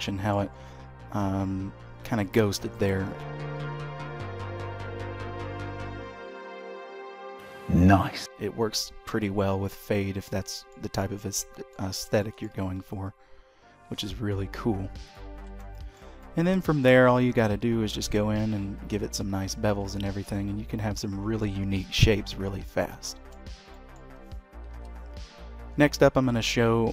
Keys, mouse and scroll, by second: 3.3 q, 9.4-9.7 scroll up 1, 9.7 middle click, 10.3 shift+middle click, 10.8 middle click, 12.0 shift+middle click, 12.6 Tab, 13.7 Tab, 14.9 click, 15.2 Tab, 15.6 shift+middle click, 16.0 middle click, 19.2 shift+middle click, 19.5 Tab, 19.8-20.4 scroll down 2, 20.2 middle click, 21.9 x, 22.9 shift+middle click, 23.6 middle click, 24.5 KP_3, 25.3 scroll up 1, 25.7 shift+middle click.